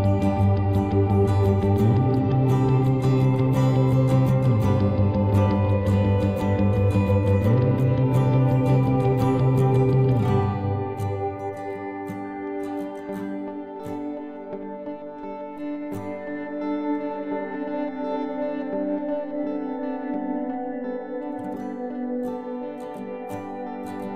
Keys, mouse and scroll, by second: 0.3 e, 1.8-3.9 right drag, 2.0 b, 2.4 g, 3.8 b, 3.9-7.0 drag, 4.2 g, 5.6 b, 6.0 g, 7.6 ctrl+s, 8.1 z, 9.5 z, 10.3 x, 11.2 ctrl+Tab, 12.1 click, 12.3 c, 12.4-13.8 right drag, 13.9 z, 14.3-16.5 middle drag, 16.2 e, 18.2 e, 19.6 KP_3, 20.5 Tab, 21.4 z.